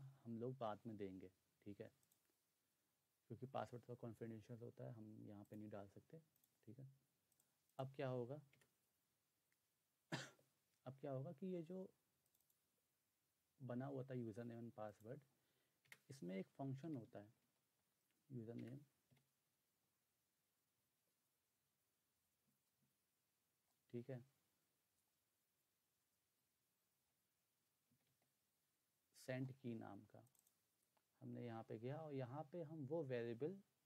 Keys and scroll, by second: 8.6 Return, 15.8 Return, 16.6-17.9 typing, 18.6 Return, 19.1 ., 27.6-28.4 typing.